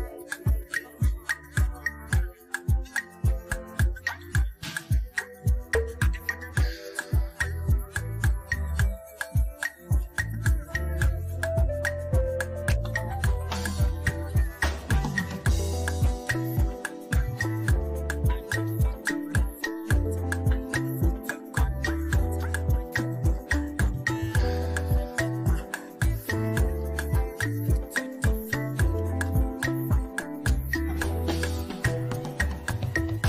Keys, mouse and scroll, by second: 1.1 space, 4.1-6.6 alt+drag, 6.6-10.2 shift+drag, 10.2-11.9 alt+drag, 14.1 right click, 15.5 click, 17.6 click, 18.7 click, 22.2-25.0 drag, 25.0 click, 31.0 click.